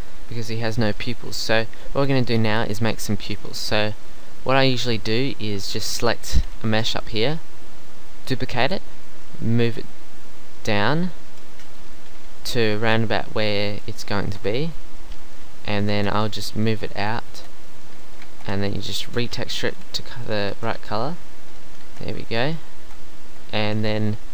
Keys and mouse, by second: 2.0 Tab, 2.5 Tab, 2.8 Tab, 7.5 middle click, 8.6 shift+d, 11.3 KP_1, 12.4 g, 13.7 g, 14.3 Tab, 15.9 Tab, 16.4 g, 17.3 Tab, 18.2 Tab, 19.1 s, 19.7 g, 20.5 shift+Tab, 20.8 g, 21.8 shift+Tab, 22.8 Tab, 23.3 Tab, 23.8 KP_3.